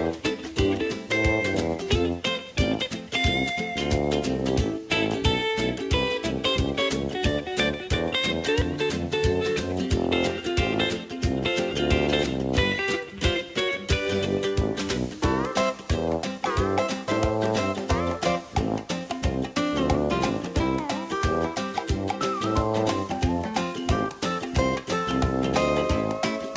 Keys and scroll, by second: 2.0-4.9 typing.